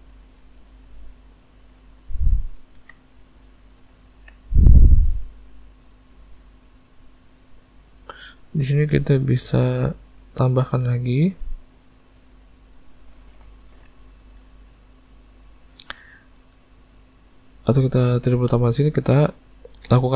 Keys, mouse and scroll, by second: 0.2 shift+middle click, 1.4 click, 2.8 alt+a, 3.1 middle click, 4.0 ctrl+middle click, 4.6 click, 7.1 click, 10.5 click, 18.8 click.